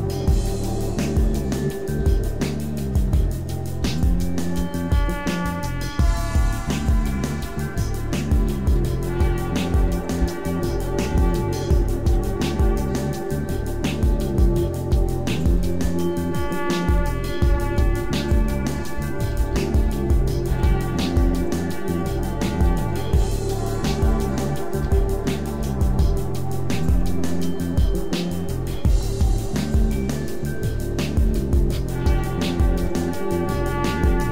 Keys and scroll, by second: 0.3 Tab, 0.7 a, 1.5 Tab, 1.9 s, 2.9 Tab, 3.4 Tab, 3.7 s, 4.5 s, 5.1 Tab, 5.3 a, 5.9 Tab, 6.7-11.0 typing, 7.4 Tab, 8.3 Tab, 12.0 Tab, 12.3 a, 13.2 Tab, 14.3 x, 14.8 e, 15.7 s, 17.4-21.4 typing, 17.8 Tab, 18.6 Tab, 21.9 Tab, 22.6-25.5 typing, 28.6 Tab, 28.8 a, 30.5 Tab, 31.1 Tab, 31.3 a, 32.7 a.